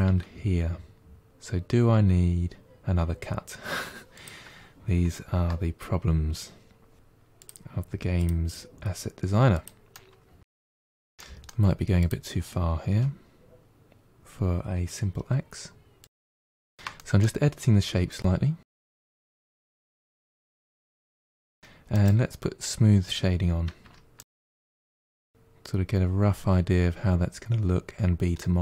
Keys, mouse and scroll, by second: 7.0 k, 8.7-10.2 middle drag, 11.1 middle click, 11.9 click, 12.7 g, 16.1 middle click, 16.6 shift+click, 16.9 middle click, 17.3 shift+click, 17.4 middle click, 17.5 g, 17.9 middle click, 18.3 scroll down 2, 18.5 middle click, 19.1 click, 19.3 middle click, 19.5 g, 20.3 click, 20.5 g, 20.9 g, 21.5 middle click, 21.8-23.7 right drag, 23.7 Tab, 24.0-24.9 right drag, 24.9-27.5 middle drag, 28.5 Tab.